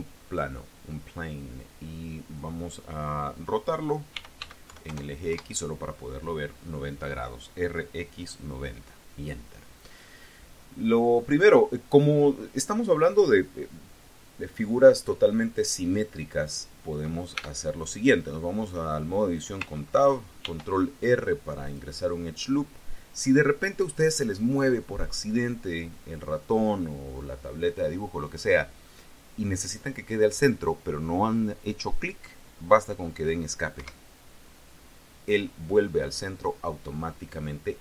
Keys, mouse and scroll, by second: 0.1 click, 3.8-4.8 typing, 5.2 KP_Enter, 10.6-11.6 scroll up 2, 12.2 scroll up 1, 17.3 Tab, 20.3 ctrl+r, 21.5 click, 33.7 Escape.